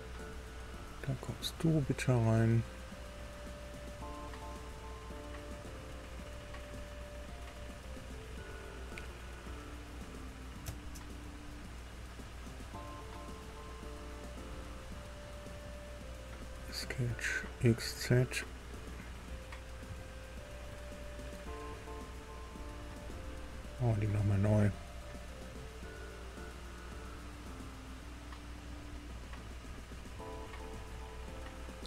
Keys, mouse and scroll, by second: 3.6-3.9 scroll down 2, 4.9-5.3 scroll up 2, 5.3 scroll down 2, 6.2 click, 7.1 click, 7.8 click, 9.9 click, 10.6 space, 11.7 scroll down 2, 12.8 click, 14.3 click, 17.3 click, 18.3 click, 19.5 scroll down 2, 19.9 shift+middle click, 20.9-22.8 shift+scroll up 3, 22.8 click, 26.5 click, 28.6 click, 29.1 right click, 29.5 scroll up 2, 31.2 click.